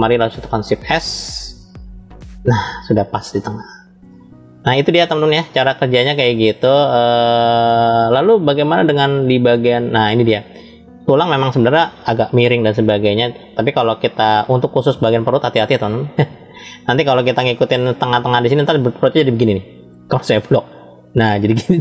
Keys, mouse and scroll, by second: 0.6 shift+s, 2.7 click, 3.3-3.6 scroll down 2, 4.4-5.4 middle drag, 4.4 scroll down 2, 6.1-7.7 shift+middle drag, 7.8-9.4 middle drag, 13.6-14.1 scroll up 2, 14.8 scroll up 1, 15.0-16.5 shift+middle drag, 18.5-20.0 drag, 20.6 click, 21.6 click.